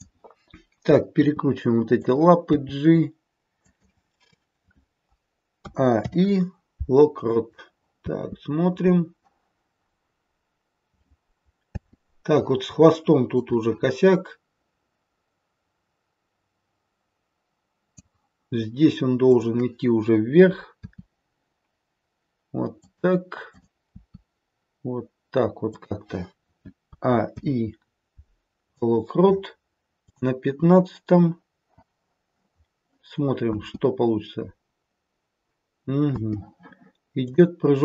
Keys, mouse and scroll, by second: 1.2 r, 2.5 g, 5.6 a, 5.9 i, 7.9 space, 11.7 space, 13.4 click, 19.3 click, 20.8 r, 23.5 click, 23.8 r, 26.9 a, 27.2 i, 30.1 click, 33.4 space, 36.1 space, 37.1 click.